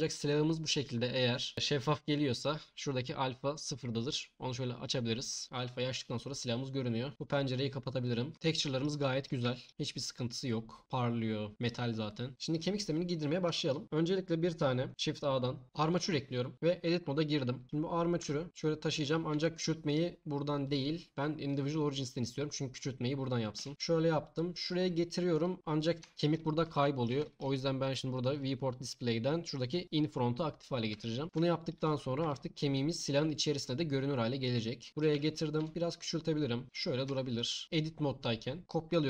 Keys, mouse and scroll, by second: 4.0 click, 7.1-7.6 drag, 8.0 click, 14.9 shift+a, 16.5 Tab, 18.2 g, 18.5 s, 18.9 click, 19.3 s, 19.9 click, 20.6-21.5 drag, 23.6 s, 23.7 g, 24.6 click, 28.3 click, 29.8 click, 32.2 g, 32.7 click, 35.6 s, 36.6 click, 37.1-37.5 alt+drag, 38.6 shift+d.